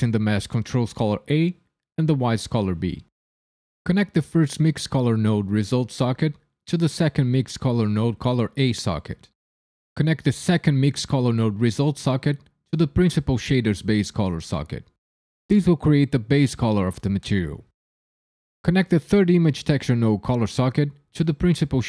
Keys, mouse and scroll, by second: 5.9 click, 11.9 click, 14.9 click, 16.6 click, 18.1 middle click, 20.5 click.